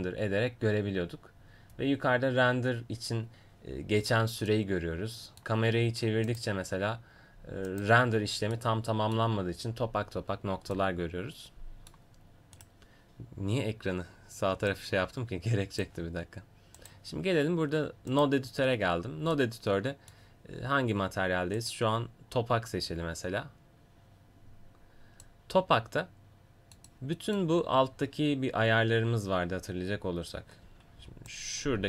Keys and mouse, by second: 12.6-14.7 right drag, 14.7-21.6 drag, 21.6-30.7 right drag, 30.7 a, 31.0 b.